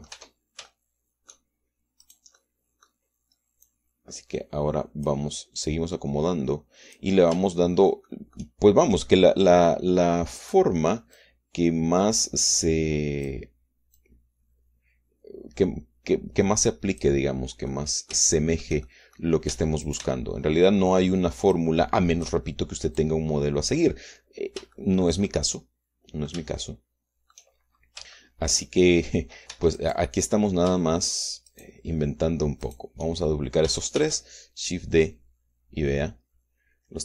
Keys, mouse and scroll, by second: 0.1 shift+click, 0.6 shift+middle click, 0.7 click, 1.1 Tab, 1.6 shift+click, 2.9 click, 3.3 middle click, 4.5-6.1 drag, 6.6-8.1 drag, 8.2 shift+middle click, 11.3 click, 12.1-14.3 drag, 14.9-18.1 drag, 18.6 middle click, 19.3 shift+middle click, 19.9 shift+middle click, 20.4 shift+Tab, 20.7 shift+click, 22.5 click, 23.9 click, 25.2-25.7 scroll down 1, 25.7-28.4 shift+middle drag, 28.4-29.1 shift+scroll up 1, 29.1 shift+middle click, 30.4 Tab, 30.7 click, 32.4 shift+click, 33.5 shift+click, 34.9 shift+d.